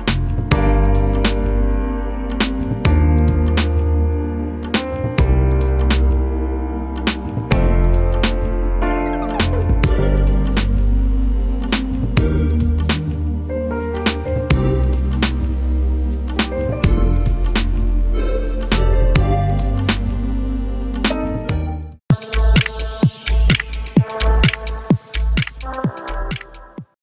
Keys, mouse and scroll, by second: 3.7 click, 11.6 ctrl+z, 12.8 click, 14.5 alt+scroll down 1, 16.9 space, 17.0 click, 17.3 space, 17.8 alt+scroll up 1.